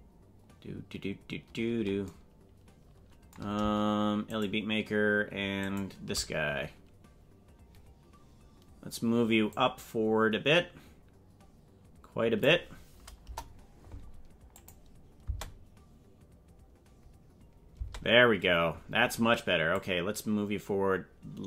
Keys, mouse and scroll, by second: 4.4 shift+right click, 5.8 shift+right click, 9.5-12.5 drag, 13.2 KP_0, 14.6 click, 15.4 space, 17.9 space, 19.8-21.4 drag.